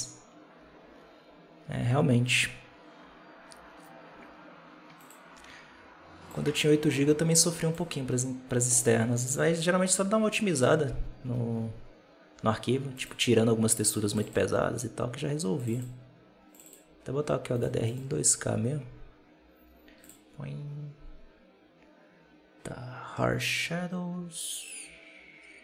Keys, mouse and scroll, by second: 4.9-5.6 drag, 6.2-7.9 drag, 19.9 click.